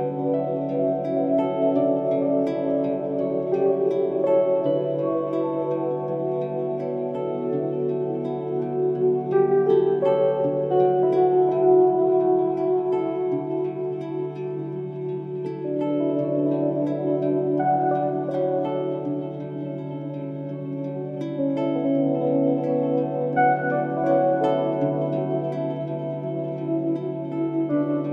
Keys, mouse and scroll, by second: 0.8 g, 4.7 middle click, 5.3 scroll down 4, 5.6 shift+middle click, 6.0 scroll up 3, 7.2 Tab, 7.5-8.8 middle drag, 8.8 click, 10.5 scroll up 1, 11.8 Tab, 13.6-14.1 scroll down 4, 14.1-15.6 shift+middle drag, 16.7 Tab, 18.6 click, 20.2-21.8 drag, 23.0 click, 23.8-25.7 drag, 26.6 click.